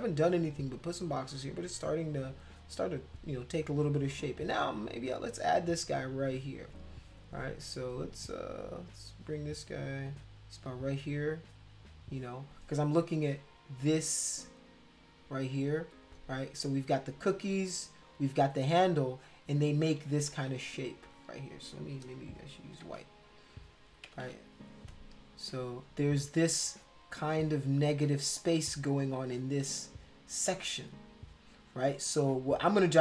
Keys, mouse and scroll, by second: 11.8 click, 13.6-15.5 drag, 16.8-18.1 drag, 18.5 click, 20.0 ctrl+z, 20.2 ctrl+z, 20.4 ctrl+z, 22.7 x, 24.1 ], 24.2 ], 26.6-31.8 drag, 31.9 click, 32.2-33.0 drag.